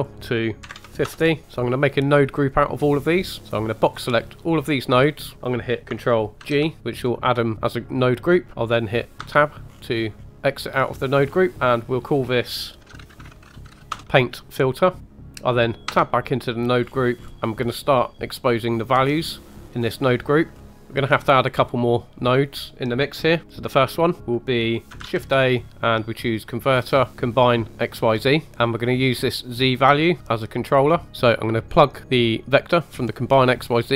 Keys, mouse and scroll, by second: 1.4 middle click, 1.4 scroll down 4, 2.0 middle click, 3.4 click, 6.4 ctrl+g, 8.5 Tab, 8.5 scroll down 1, 9.2 Tab, 9.7-10.6 scroll up 5, 10.3 middle click, 10.8-11.5 scroll up 3, 11.9-13.9 drag, 15.0 click, 15.8 Tab, 16.8-17.3 scroll down 4, 17.3 click, 17.3 right click, 18.4 click, 19.0 click, 20.5 scroll up 1, 20.7 middle click, 22.3-23.4 middle drag, 23.4-24.0 scroll up 2, 23.7-24.0 middle drag, 25.0 shift+a, 28.5 click, 29.4 click, 30.9 click, 32.6 click, 32.8 drag.